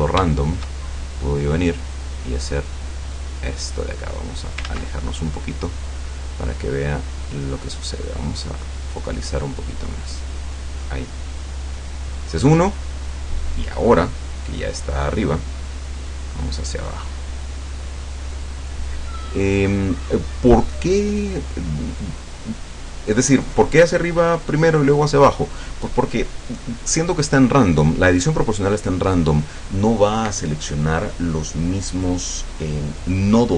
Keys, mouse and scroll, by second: 0.3 shift+middle click, 2.0 click, 3.0-3.6 scroll down 4, 4.2 scroll down 2, 4.7 ctrl+z, 5.1-6.0 scroll down 2, 6.0 click, 8.0-8.4 scroll up 2, 9.1-9.5 scroll down 2, 10.5 scroll up 2, 15.9-18.9 drag, 19.2-19.5 scroll up 1, 19.6 scroll down 1.